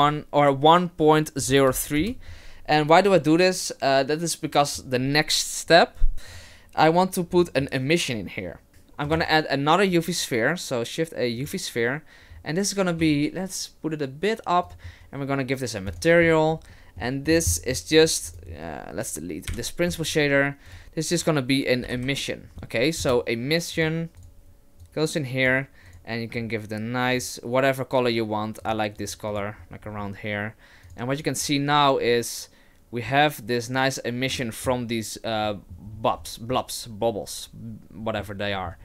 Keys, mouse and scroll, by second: 6.4 click, 7.3-8.7 scroll down 5, 7.6-8.7 scroll up 1, 8.7 shift+a, 9.3 shift+a, 12.3-13.0 scroll up 3, 13.0 s, 15.9 click, 16.7 middle click, 17.3-18.0 scroll down 7, 17.5 middle click, 18.0 click, 18.3 click, 19.5 Delete, 20.0 shift+a, 22.0 m, 24.8 click, 25.9 click, 29.3 click, 30.9 click, 34.3 middle click, 35.5 middle click, 35.8-36.3 scroll down 5, 36.5 middle click, 38.5 middle click.